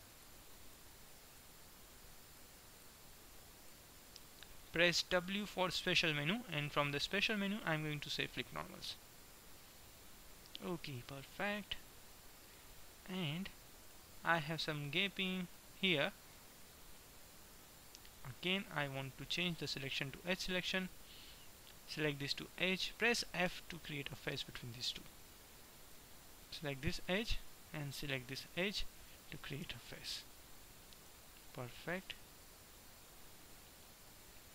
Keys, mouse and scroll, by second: 5.1 w, 9.0 middle click, 10.1 middle click, 11.6 middle click, 14.0 Tab, 16.8 Tab, 17.6 Tab, 19.5 click, 20.5-21.5 middle drag, 21.5-22.5 right drag, 22.6-23.6 right drag, 23.6 middle click, 23.6 f, 26.0-27.3 middle drag, 29.8 f, 31.1 middle click, 33.0 middle click, 33.5-34.5 middle drag.